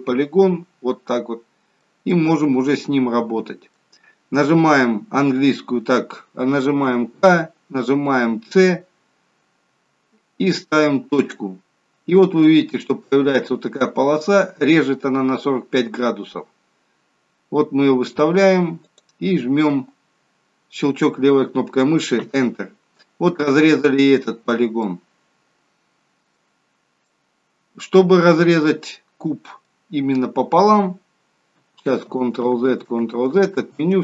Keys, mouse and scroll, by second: 2.0 middle click, 6.8 k, 24.7 middle click, 26.6-27.0 scroll up 1, 27.0 middle click, 28.9 middle click, 32.0 ctrl+z, 32.4 ctrl+z, 33.4 ctrl+z, 33.8 ctrl+z.